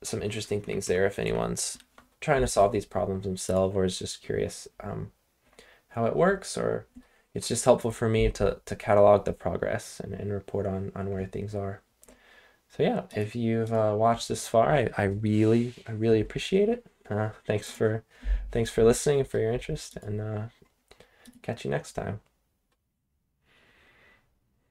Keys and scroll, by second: 0.0-1.7 typing.